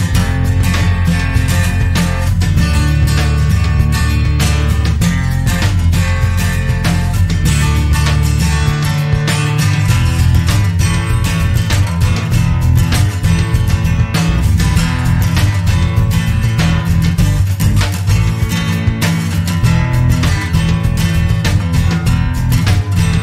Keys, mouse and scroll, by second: 0.0 click, 1.1 click, 2.3 click, 3.5-4.2 drag, 4.3-5.2 typing, 7.2 click, 8.0 1, 8.3 8, 9.3 0, 10.7 click, 11.2 click, 13.0-13.5 scroll up 2, 14.6 click, 16.5 click, 17.6 scroll down 1, 18.7-21.3 scroll down 14, 21.6 scroll down 2, 22.9-23.2 scroll up 2.